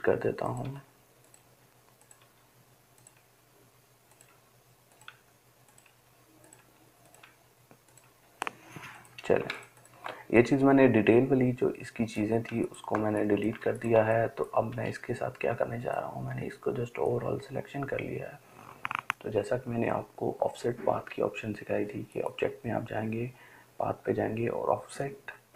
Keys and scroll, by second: 0.1 Delete, 3.1 Delete, 4.6 Delete, 5.3 Delete, 8.5 Delete.